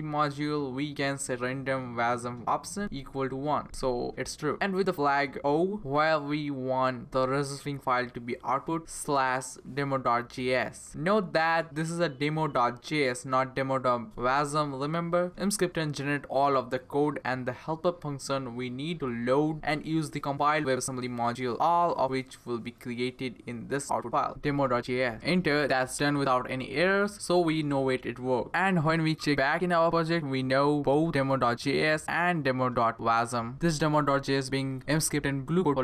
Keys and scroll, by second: 0.0-2.2 typing, 3.2 -, 4.5 o, 5.2 space, 8.9-11.6 typing, 24.6 Return.